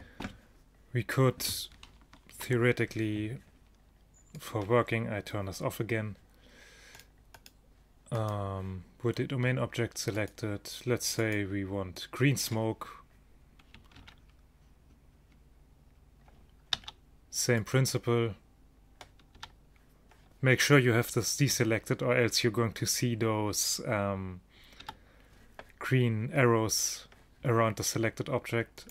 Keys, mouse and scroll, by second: 4.4 click, 7.0-10.0 right drag, 10.0 middle click, 10.3-13.0 drag, 14.0 alt+a, 16.8 alt+a, 19.4 a, 21.6 a, 24.9 a.